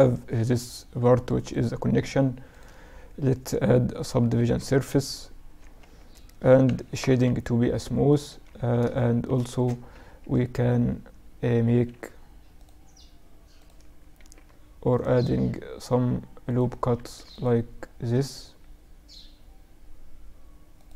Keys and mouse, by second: 3.2 ctrl+3, 4.1-5.9 right drag, 4.6 Tab, 5.8 Tab, 7.1 click, 7.3 t, 8.0-10.5 middle drag, 8.7 Tab, 10.6 ctrl+r, 13.1 ctrl+r, 16.0 ctrl+r, 20.6 ctrl+r.